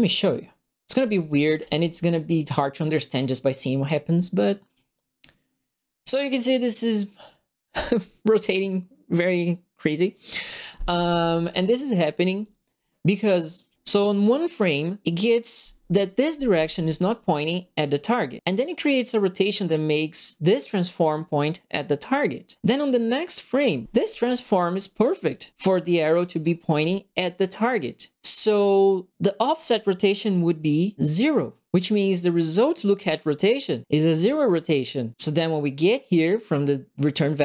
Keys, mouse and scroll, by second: 1.5 click, 4.6 click, 11.6 click, 13.6 click, 20.5 click, 25.9 click, 26.7 click.